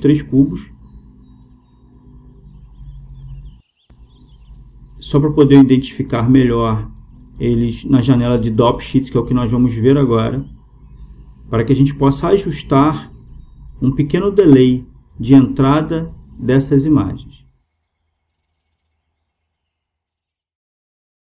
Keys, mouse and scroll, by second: 4.1-5.8 right drag, 4.9-6.8 drag, 7.9-9.7 right drag, 9.3-11.1 drag, 14.4-16.1 drag.